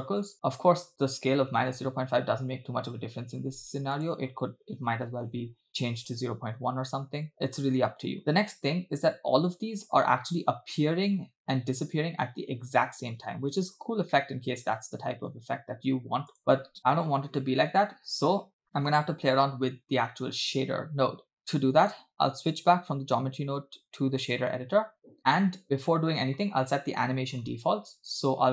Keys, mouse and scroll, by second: 0.3 space, 0.6 space, 0.9 space, 4.0-6.1 drag, 7.1 space, 8.6 space, 14.1-15.3 middle drag, 16.4 click, 16.6 space, 16.8 middle click, 21.4 scroll down 3, 21.5 middle click, 22.6-24.4 drag.